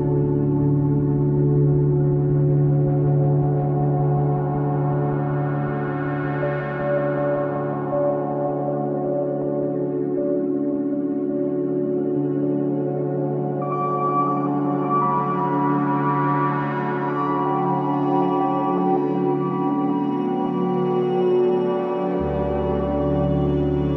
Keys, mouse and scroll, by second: 1.9 click, 5.2 click, 7.8 ctrl+z, 8.5 click, 12.5 ctrl+z, 13.7 click, 17.5 alt+middle click, 18.1 scroll up 1, 18.4 alt+middle click, 19.9 ctrl+z, 22.5 click.